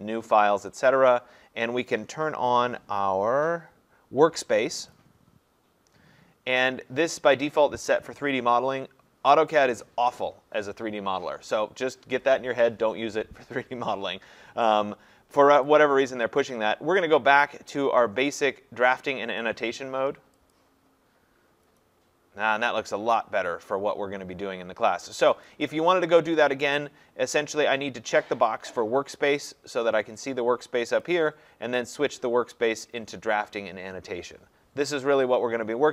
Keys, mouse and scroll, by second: 0.9 click, 4.9 click, 15.9 click, 20.5 click, 25.5 click, 31.1 click.